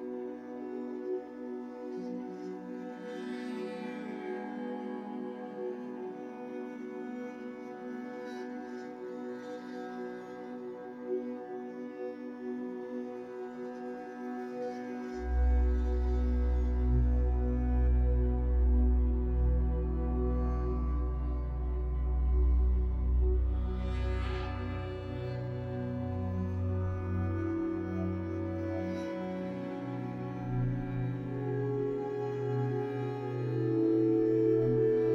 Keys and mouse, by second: 0.0-0.6 middle drag, 0.6 Tab, 1.1 middle click, 1.7 click, 2.1 middle click, 3.2-4.5 ctrl+z, 4.7 ctrl+z, 4.8 ctrl+z, 5.2 middle click, 5.6 click, 5.9 middle click, 6.7 Tab, 6.9 middle click, 7.2 shift+middle click, 7.6 middle click, 8.3 ctrl+r, 10.7 Tab, 11.0 Tab, 11.7 click, 12.4 3, 12.6 click, 13.0 x, 13.6 Tab, 14.2 middle click, 14.7 Tab, 17.0 ctrl+z, 17.4 ctrl+z, 18.0 ctrl+z, 18.8 shift+middle click, 20.7 1, 23.0 1, 29.4 e, 31.8 e, 33.2 x.